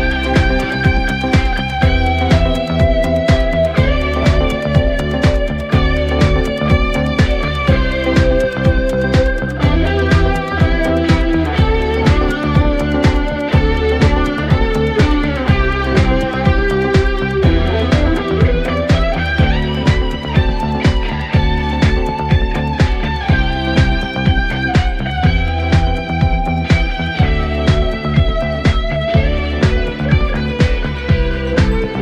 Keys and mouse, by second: 0.3 middle click, 2.0 middle click, 2.5 middle click, 3.1 middle click, 4.4 middle click, 4.7 middle click, 8.0 middle click, 8.5 middle click, 8.9 middle click, 9.4 middle click, 9.8 middle click, 11.4 right click, 11.8 right click, 12.3 middle click, 12.8 middle click, 13.9 right click, 19.9 middle click, 20.4 middle click, 31.2 middle click.